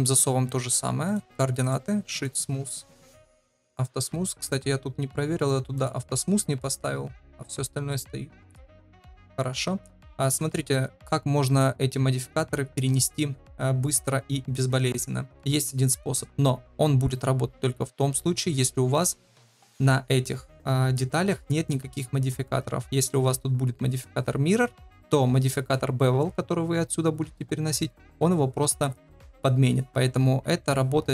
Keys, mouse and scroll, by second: 0.5 ctrl+a, 1.8 click, 3.0 click, 3.7 click, 4.4 click, 5.7 click, 6.5 click, 7.9 click, 8.6 click, 10.2-10.7 middle drag, 18.9 click, 25.6 click.